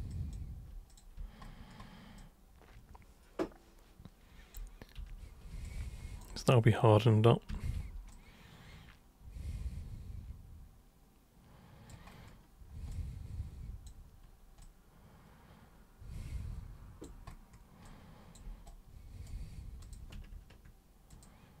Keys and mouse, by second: 0.1 alt+super+click, 0.9 super+click, 2.2-4.5 alt+super+drag, 5.0 super+3, 5.7 alt+super+click, 7.5 super+1, 8.1-11.9 alt+super+drag, 12.9 alt+click, 14.6-17.1 alt+drag, 17.8-18.4 alt+drag, 18.7 right click, 19.8 super+drag, 21.1 ctrl+shift+super+click.